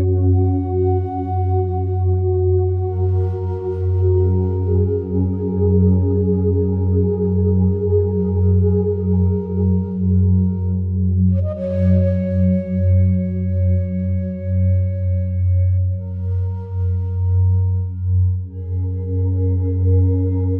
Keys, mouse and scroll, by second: 3.5 ctrl+z, 4.3 ctrl+z, 5.0-6.8 alt+drag, 6.8 3, 7.2 right click, 13.7 click, 14.9-16.5 alt+drag, 16.5 ctrl+r, 17.3 click.